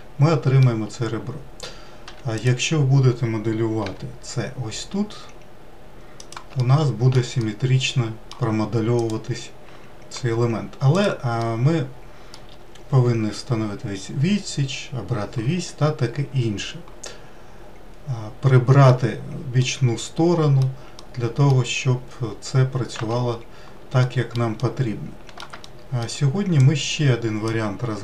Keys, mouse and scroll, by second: 2.0 1, 2.4 click, 3.9 g, 6.6 alt+middle click, 7.4-9.0 middle drag, 9.0 click, 10.2 g, 11.4-14.5 middle drag, 15.6-17.1 scroll down 4, 17.1-23.0 middle drag, 23.0 Tab, 24.0-26.6 middle drag, 26.6 click.